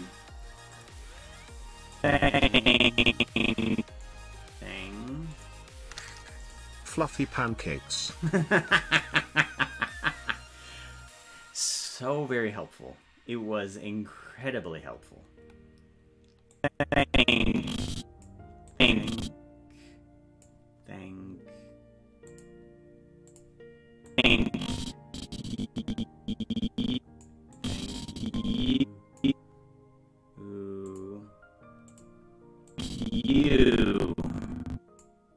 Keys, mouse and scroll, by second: 0.8 click, 2.0-4.2 drag, 5.4 click, 6.4 click, 16.6-18.3 drag, 18.7-20.5 drag, 22.3 click, 23.3 click, 24.1-27.3 drag, 27.6-29.2 drag, 30.9 click, 31.9 click, 32.7-35.0 drag.